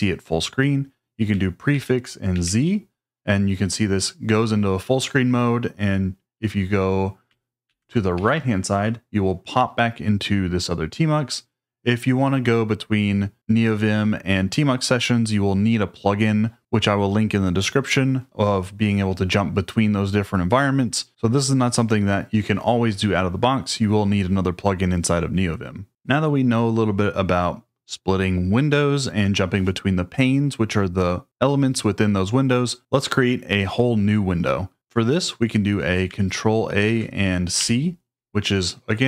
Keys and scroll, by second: 1.7 ctrl+a, 2.3 z, 7.6 ctrl+a, 8.1 Right, 36.8 ctrl+a, 37.6 c.